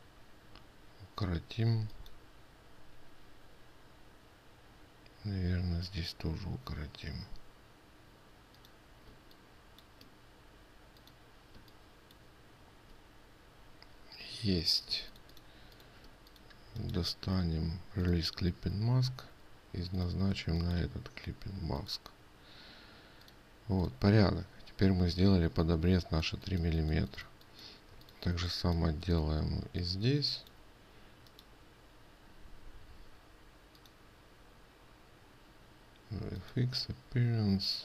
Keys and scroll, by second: 15.5 ctrl+space.